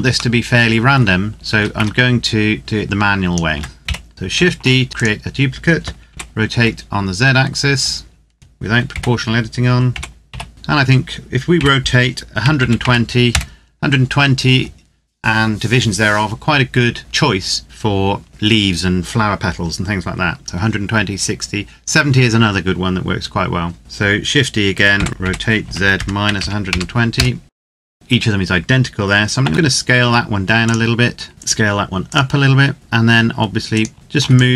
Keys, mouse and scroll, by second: 0.3 shift+middle click, 1.2 scroll up 1, 1.3 a, 1.6 a, 2.6 click, 3.3 Tab, 3.8 o, 4.1 shift+d, 4.9 click, 5.8 r, 6.3 z, 8.0 Escape, 8.7 o, 9.7 r, 10.1 z, 10.5 Escape, 11.3 r, 12.1 KP_1, 12.3 KP_2, 12.5 KP_0, 13.0 KP_Enter, 13.8-15.7 scroll down 1, 23.8 click, 24.7-26.4 typing, 25.7 KP_Subtract, 26.8 KP_Enter, 27.6 middle click, 29.2 s, 30.3 click, 31.3 s, 31.8 click, 32.5 Tab, 33.4 right click, 33.9 shift+right click, 34.1 click.